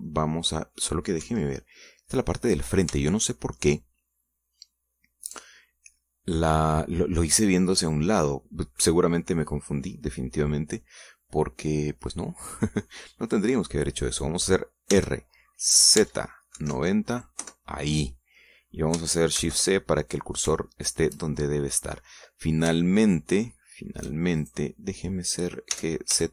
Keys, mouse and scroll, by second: 1.3 middle click, 1.7-2.0 scroll down 2, 2.4 KP_1, 4.3-7.0 shift+middle drag, 16.1 r, 17.2 z, 17.7 KP_9, 17.9 KP_0, 18.6 KP_Enter, 20.6 shift+c, 21.5 scroll up 3, 21.9 shift+middle click, 23.1 scroll down 2, 24.0-25.4 shift+middle drag, 25.6 shift+right click.